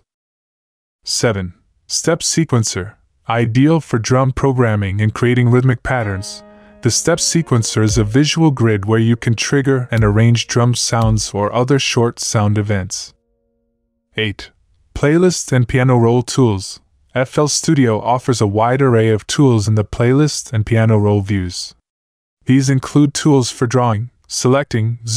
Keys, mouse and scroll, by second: 15.4 F1.